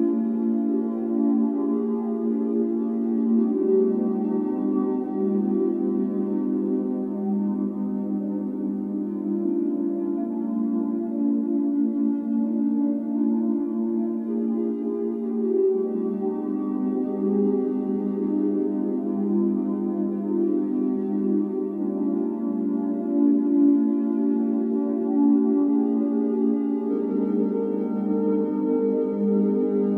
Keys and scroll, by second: 0.3 Escape, 1.0 o, 6.0 Escape, 6.5 x, 8.3 c, 13.0-14.2 typing, 14.5 Return, 18.2 m, 19.4 i, 28.4-29.9 typing.